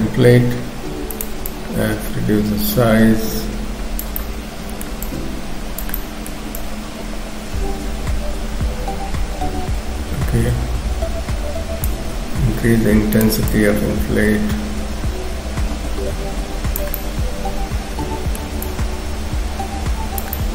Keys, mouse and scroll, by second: 1.5 click, 4.2 middle click, 5.1 click, 6.0 middle click, 6.6 click, 12.4 shift+f, 13.5 click, 17.0 middle click, 18.7 click, 20.4 middle click.